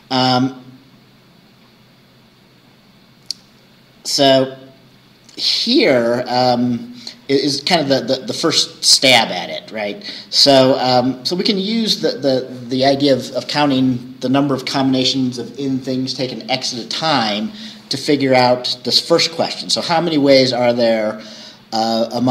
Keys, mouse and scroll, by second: 0.0-0.3 scroll down 2, 9.4-9.7 scroll down 2, 18.3-18.7 scroll up 2, 20.8-21.2 scroll down 2.